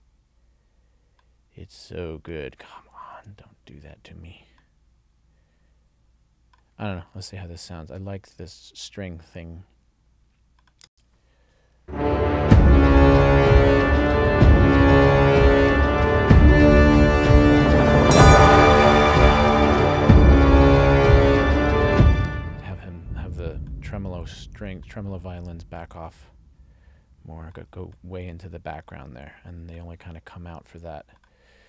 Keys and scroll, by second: 3.2 super+z, 10.9 space, 21.8 space.